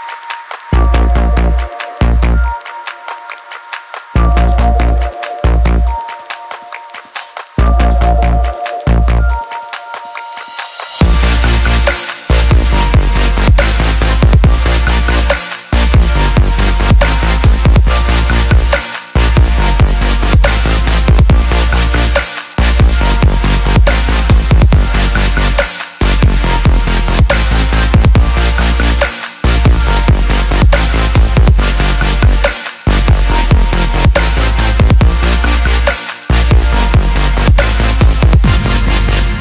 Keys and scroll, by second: 31.1 ctrl+z, 31.5 ctrl+z.